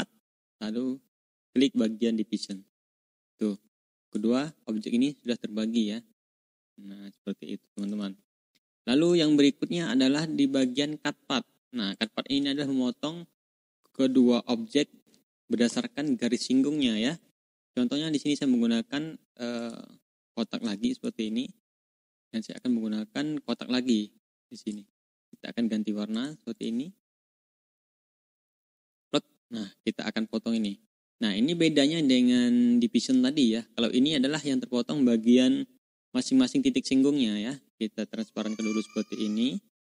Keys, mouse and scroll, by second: 3.2 click, 3.5 ctrl+scroll down 2, 4.0 ctrl+click, 4.4-7.8 drag, 8.4 click, 9.0-9.3 ctrl+scroll down 2, 9.4-9.7 ctrl+scroll up 2, 10.5 click, 11.8 click, 12.3-12.9 ctrl+scroll down 2, 13.2 ctrl+scroll up 2, 13.9-15.0 drag, 15.6 BackSpace, 18.2 click, 19.5 click, 20.0 click, 22.4 click, 23.4 click, 24.2 click, 26.0 click, 26.4 click, 27.4 click, 27.9 click, 28.2-30.3 drag, 30.5 click, 31.3 ctrl+scroll up 2, 37.4 click, 38.5-39.9 drag.